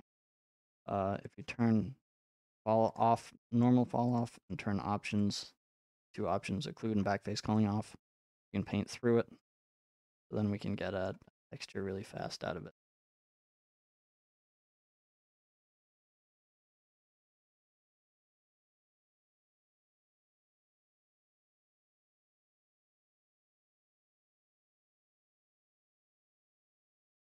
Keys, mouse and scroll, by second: 0.3 middle click, 1.3 click, 2.1 middle click, 3.0 click, 4.2 click, 5.8-7.8 drag, 9.4 click, 9.5-11.0 drag, 11.0 middle click, 11.5 scroll down 3, 13.8 click, 24.3-25.4 drag, 27.0 middle click, 27.0 f.